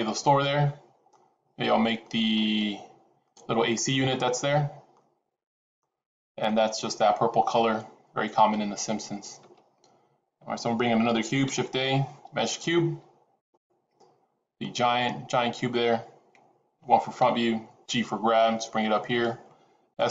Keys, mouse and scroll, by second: 0.3 middle click, 1.9 middle click, 11.4 shift+a, 14.5 middle click, 17.1 KP_1, 17.7 g, 19.9 s.